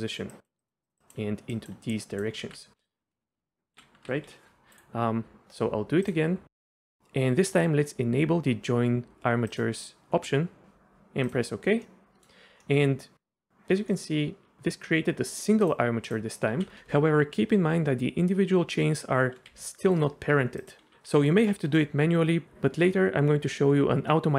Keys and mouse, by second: 0.0-4.1 typing, 0.0 click, 0.3 click, 0.8 click, 1.0 click, 1.5 click, 1.9 click, 2.8 click, 4.9-11.3 drag, 11.8 middle click, 12.6 middle click, 13.2 Tab, 13.9-15.3 middle drag, 15.6 click, 16.0 click, 16.5 r, 19.5 g, 19.9-20.9 drag.